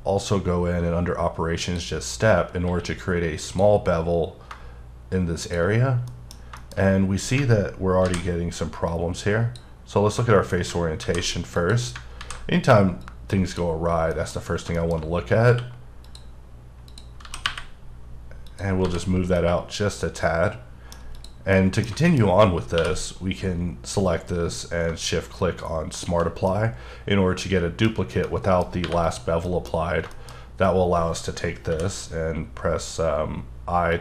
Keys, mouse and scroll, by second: 1.6 click, 2.4 scroll up 2, 2.7 q, 3.4 click, 5.7-6.1 scroll down 2, 6.3 middle click, 6.6 double middle click, 6.8-7.4 scroll up 3, 8.1 alt+v, 8.9 click, 9.9-10.5 scroll down 3, 10.5-11.0 scroll up 2, 11.0 alt+v, 11.6 click, 12.2 alt+v, 13.0 click, 13.9 scroll down 3, 14.1 middle click, 14.3 scroll up 3, 14.8 shift+middle click, 15.0-15.4 shift+scroll up 2, 15.4 scroll down 1, 15.5 q, 16.0 click, 16.5-16.9 scroll down 1, 17.2 g, 17.4 y, 18.7-19.4 scroll down 5, 18.8 h, 18.9 h, 19.4 middle click, 21.2 click, 21.5 middle click, 22.0 double middle click, 22.8 q, 25.4 shift+Num_Lock, 25.9 shift+click, 26.5 middle click, 28.2 middle click, 28.8 3, 29.0 click, 29.4 middle click, 29.8-30.1 scroll up 2, 30.1 middle click, 30.4-30.7 scroll up 1, 31.7 i, 33.9 click.